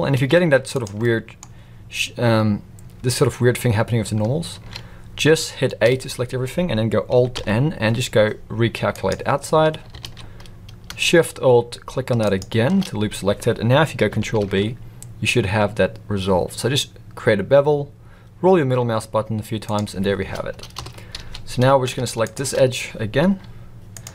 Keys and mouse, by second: 1.0 middle click, 4.5 ctrl+z, 5.9 a, 7.3 alt+n, 10.0 alt+a, 12.4-12.7 alt+shift+drag, 14.4 ctrl+b, 20.7 KP_7, 21.1 alt+a, 22.2 alt+shift+click, 23.3 g.